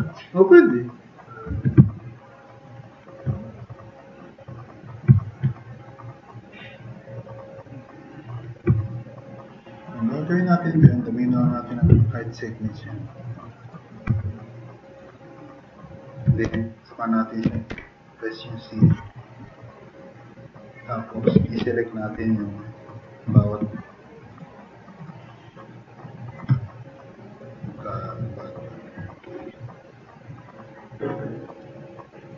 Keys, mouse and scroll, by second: 3.6-5.0 drag, 5.9 click, 7.5 click, 8.7 drag, 9.2-9.8 drag, 14.3-14.9 drag, 15.9-16.2 drag, 16.5-18.2 typing, 21.6-22.1 drag, 22.7 click, 22.9 click, 26.6-27.2 drag, 28.3 drag, 28.7 click, 29.0 click, 29.4 drag, 29.7 drag, 30.2 drag, 31.3-32.3 drag.